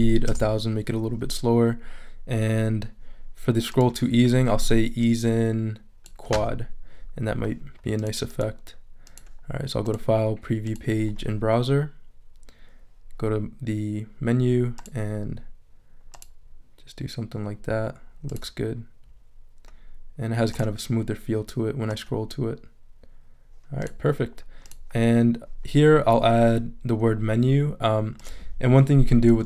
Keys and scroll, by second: 0.0-0.2 typing, 0.3 Return.